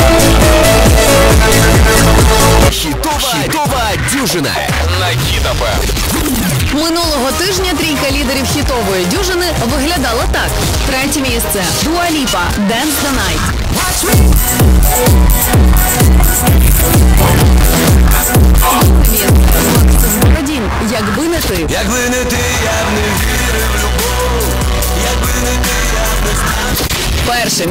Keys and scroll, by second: 2.6 Page_Down, 20.3 Page_Down.